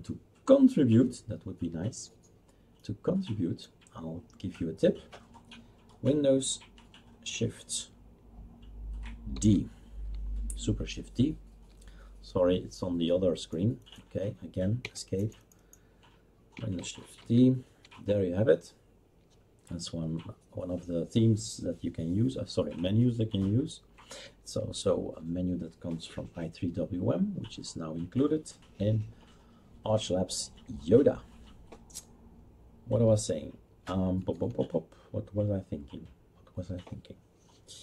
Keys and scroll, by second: 9.3 shift+super+d, 14.9 Escape, 17.2 shift+super+d.